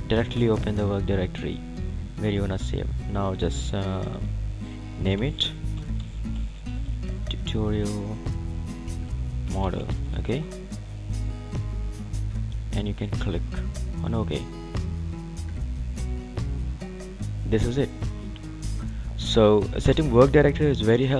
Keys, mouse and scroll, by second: 2.9 click, 5.1-7.7 typing, 9.5-10.9 typing, 13.3 click, 19.1 click.